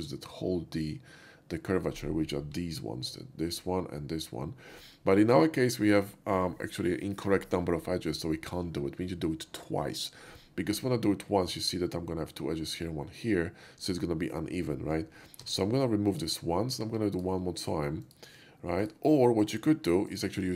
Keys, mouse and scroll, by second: 2.7 typing, 15.4 x, 16.1 click, 17.2 alt+click, 18.1 alt+shift+click, 18.9 alt+shift+click, 19.5 alt+shift+click, 20.1 alt+shift+click.